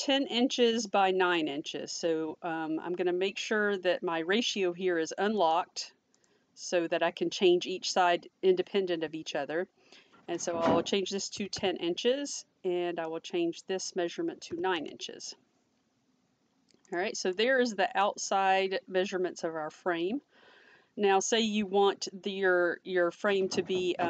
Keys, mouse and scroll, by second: 5.6 click, 10.4 click, 11.3 1, 11.5 0, 13.1 click, 14.7 Return, 17.4 click.